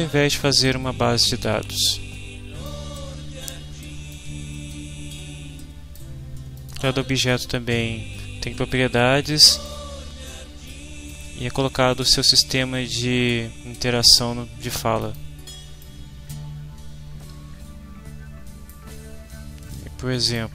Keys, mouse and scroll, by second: 1.7-2.8 drag, 4.1-6.1 drag, 6.5 click, 8.7 click, 9.5 click, 10.7 click, 16.0-18.9 right drag, 20.3 click.